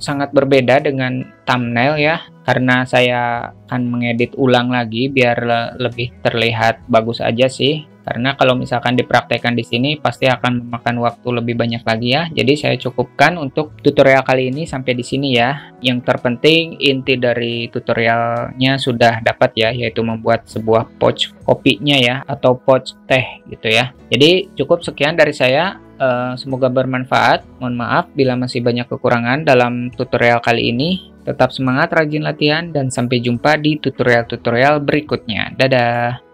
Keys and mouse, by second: 35.7 click.